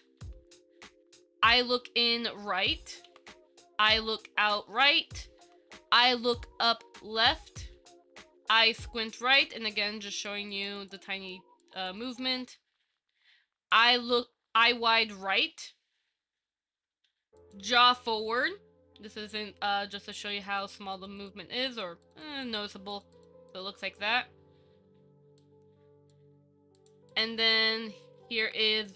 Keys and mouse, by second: 0.4 Down, 3.3 Down, 10.4 click, 10.7 click, 11.0 click, 11.8 click, 18.6 ctrl+KP_3, 20.5 click, 21.1 click, 21.9 click, 22.4 click, 23.1 click, 23.7 click, 25.6 click, 27.0 click, 27.3 click, 28.6 KP_1.